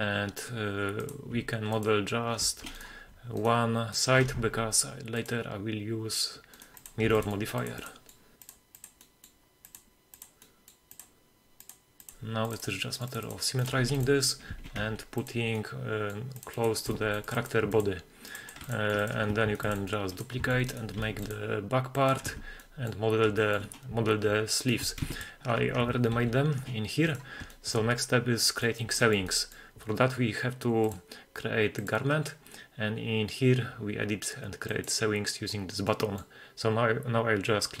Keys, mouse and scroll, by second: 1.4 g, 1.8 click, 1.8 g, 2.8 right click, 3.4 shift+right click, 3.9 shift+right click, 4.4 w, 6.6 right click, 7.0 g, 7.1 middle click, 7.8 click, 8.4 right click, 8.6 g, 8.9 click, 9.2 right click, 9.5 shift+right click, 9.9 shift+right click, 10.1 c, 10.8 c, 11.2 v, 12.5 Tab, 12.5-13.2 drag, 12.5 v, 13.6-14.0 middle drag, 14.6 r, 14.8 x, 16.6 click, 16.6 x, 16.9 g, 16.9 middle click, 17.4 click, 17.7 s, 18.4 click, 18.7 shift+middle click, 19.0-20.1 scroll up 3, 19.5 shift+d, 19.6 shift+middle click, 20.1 click, 20.4 Tab, 20.7 right click, 21.0 g, 22.0 click, 22.3 Tab, 22.6-22.9 middle drag, 23.4 shift+middle drag, 23.6-24.3 scroll up 2, 24.6 shift+right click, 25.0 x, 26.2 alt+h, 26.6-27.1 scroll up 2, 27.1 right click, 27.5 shift+middle drag, 27.8-28.4 scroll up 1, 28.4 middle drag, 29.0 shift+middle click, 29.3 middle click, 30.8 click, 31.8 click, 34.7-37.8 drag, 35.9-36.6 middle drag.